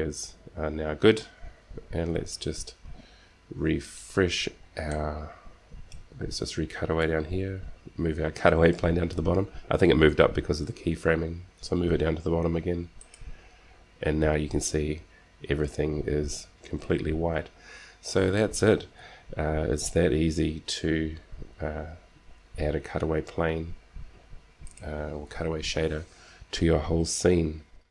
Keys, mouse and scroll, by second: 2.3-3.9 drag, 3.9 middle click, 4.5 right click, 5.0 middle click, 7.7 g, 13.7-14.9 drag, 19.7 g.